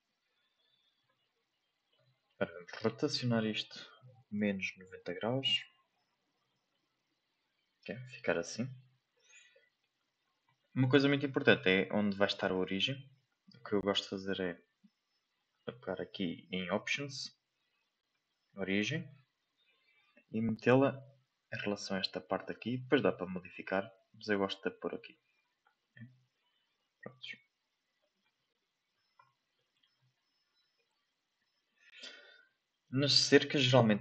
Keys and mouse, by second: 1.2-1.9 shift+middle drag, 2.7 r, 9.5-9.8 shift+middle drag, 13.0 shift+middle click, 14.2 shift+middle click, 16.3-18.8 drag, 19.8 g, 27.1-28.6 drag, 29.5 shift+middle click, 33.5-33.9 shift+middle drag.